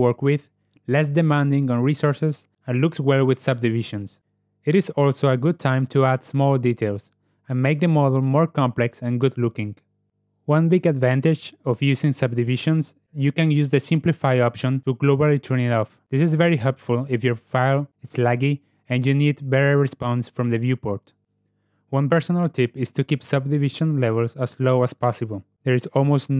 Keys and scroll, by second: 4.6 alt+F8, 16.8 0, 17.1 Return.